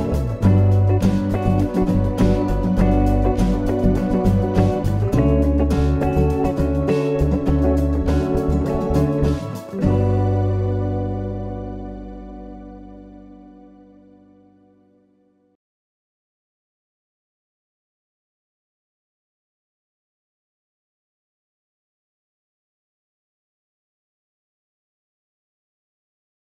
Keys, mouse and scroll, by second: 0.0 click, 0.9 click, 10.5-11.1 scroll up 4, 11.6 middle click, 14.5 shift+middle click, 15.9 scroll down 1, 16.1-16.5 scroll up 2, 16.9-17.5 scroll up 3, 17.5-18.3 scroll up 2, 18.3 middle click, 18.3 scroll up 1, 21.8 click.